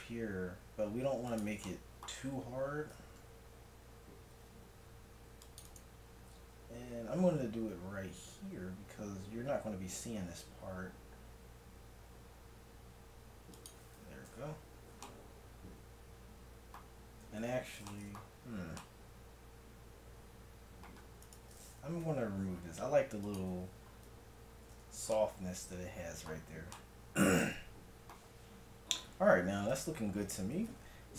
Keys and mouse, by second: 2.2 Tab, 3.0 Tab, 4.3 ctrl+r, 6.8 ctrl+b, 14.2 a, 14.4 Tab, 17.2 Tab, 22.1 x, 23.2 click, 24.5 a, 24.8 Tab, 29.7 KP_1.